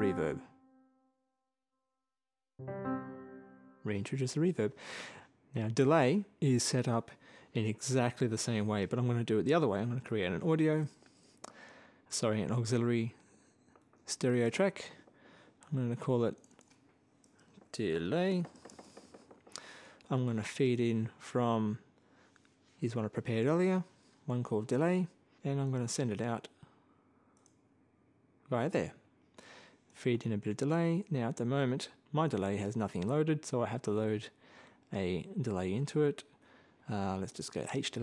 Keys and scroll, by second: 10.2 shift+super+n, 12.5 super+Right, 13.2 super+Down, 17.1-18.6 typing.